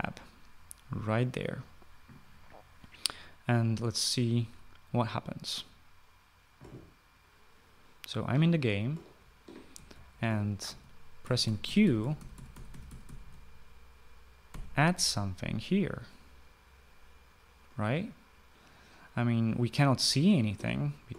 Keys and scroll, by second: 8.7-13.5 typing, 15.0 Escape, 20.5-21.1 typing.